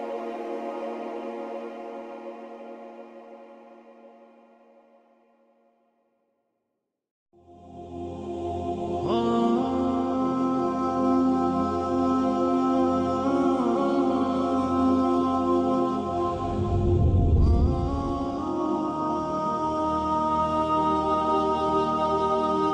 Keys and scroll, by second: 0.3 space, 10.4 ctrl+c, 10.7 b, 11.1 Right, 11.2 Right, 11.3 Right, 11.4 Right, 11.7 Right, 12.3 Left, 12.4 Left, 12.5 Left, 12.6 Left, 12.7 Left, 13.1 Left, 14.1 ctrl+c, 14.3 ctrl+b, 14.7 Right, 15.3 Right, 15.4 Right, 15.5 Right, 16.3 Left, 16.5 Left, 18.9 Left, 20.1 Left, 20.8 Left, 20.9 Left, 21.5 Left, 22.0 Left, 22.1 Left, 22.3 Left.